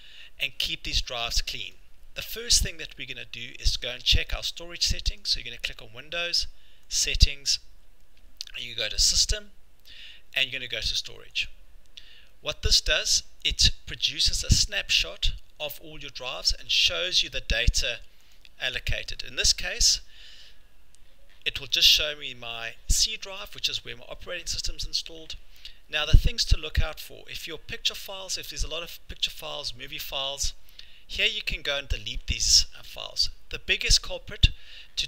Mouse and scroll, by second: 1.7 click, 8.9 click, 11.5 click, 13.2 click, 25.9 scroll, 32.6-32.9 scroll.